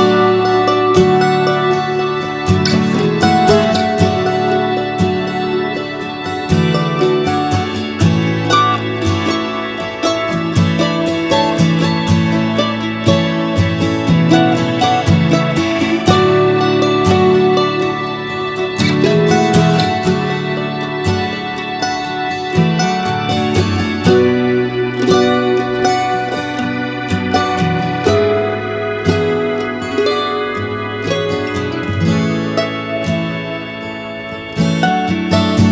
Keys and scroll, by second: 4.2 Right.